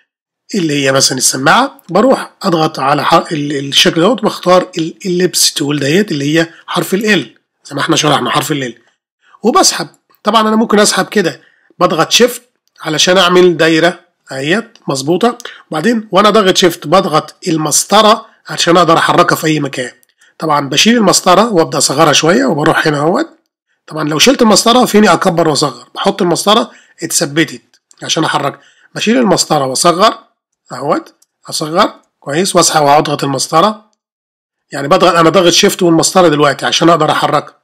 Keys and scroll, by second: 18.0 shift+space, 22.1 shift+space, 26.0 shift+space, 30.5 shift+space, 32.0 shift+space, 34.6 shift+space.